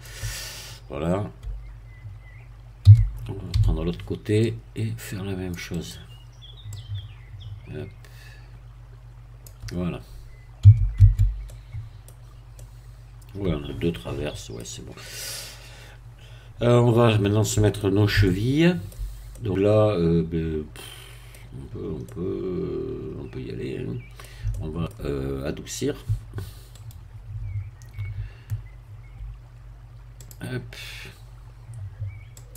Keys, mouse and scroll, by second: 2.8 a, 3.5 c, 4.4-5.7 drag, 5.7 right click, 6.7-9.6 drag, 10.6 z, 10.9 Tab, 11.5 middle click, 12.1 scroll down 1, 12.5-14.7 middle drag, 15.0-18.1 middle drag, 18.1-21.4 shift+middle drag, 21.6 scroll up 1, 22.1-24.3 middle drag, 24.5 shift+middle click, 26.7 right click, 30.1-32.5 drag.